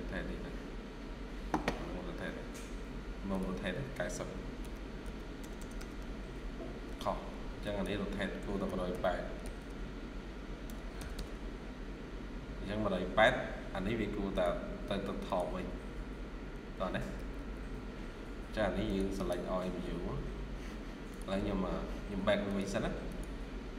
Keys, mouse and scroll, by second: 2.1 scroll down 1, 4.5-4.9 typing, 5.3 Return, 5.4 Return, 8.6-9.5 typing, 10.5 typing, 10.8 Return, 11.0 Return, 17.0 Escape, 17.2 Escape, 17.7 scroll down 1, 19.0 right click.